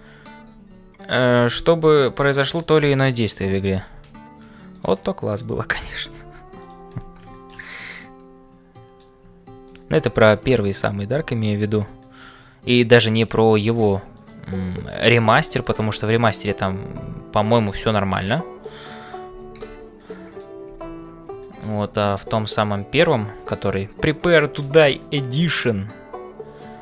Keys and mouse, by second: 0.0-26.8 typing, 1.6 click, 2.1 middle click, 5.4 click, 7.3 middle click, 8.0-9.1 middle drag, 9.6 click, 12.0 middle click, 12.9 middle click, 14.6 middle click, 16.0 middle click, 17.8 middle click, 20.1 middle click, 21.4 shift+middle click, 21.8-24.7 middle drag, 25.0 middle click, 25.6-26.8 middle drag.